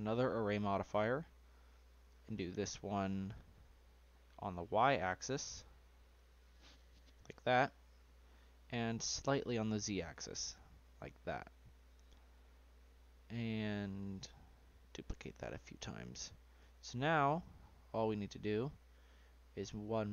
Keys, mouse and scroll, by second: 0.8-2.2 scroll down 6, 2.2-3.8 drag, 4.0-6.2 drag, 8.0-9.7 drag, 9.7-10.3 scroll down 1, 10.3-14.0 middle drag, 14.0-15.7 drag, 15.7-16.1 scroll down 2, 16.1-17.5 middle drag, 17.5-19.0 scroll up 5.